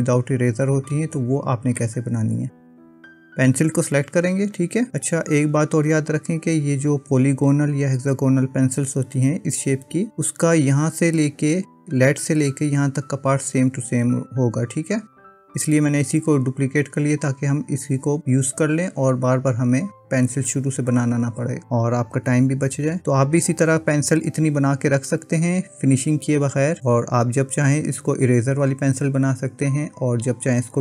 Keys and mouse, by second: 4.1 click.